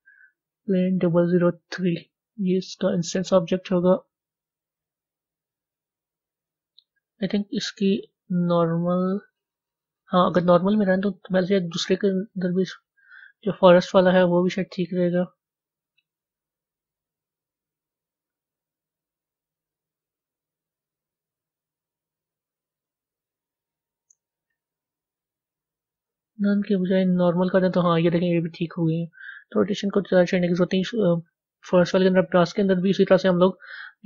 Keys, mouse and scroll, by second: 1.4 click, 2.6 scroll up 3, 3.5 scroll down 2, 8.2-9.2 drag, 9.2-10.1 scroll up 7, 12.5 click, 13.3-14.0 scroll down 6, 15.4-18.5 drag, 22.8-27.5 drag, 27.5-32.8 middle drag, 32.8 click.